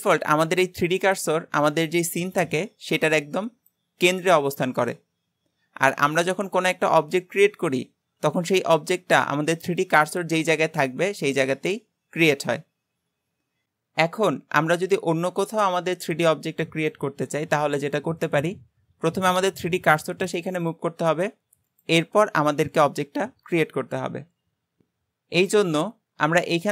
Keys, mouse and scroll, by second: 13.6 click.